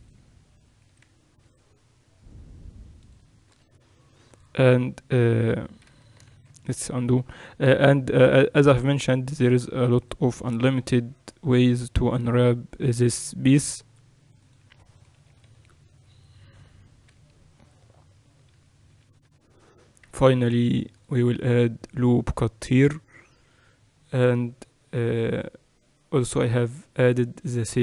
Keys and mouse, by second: 4.6 ctrl+r, 7.0 ctrl+z, 7.8 ctrl+r, 11.5 ctrl+r, 16.0 KP_4, 16.5 KP_4, 17.8 Escape, 18.7-19.9 typing, 21.2 ctrl+r, 24.1 Tab, 27.1-27.8 drag.